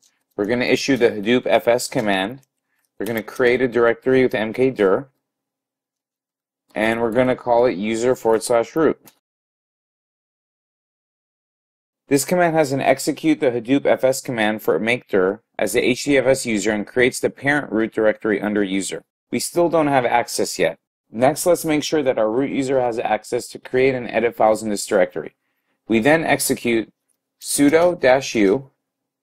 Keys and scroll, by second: 0.0-3.9 typing, 27.7 typing.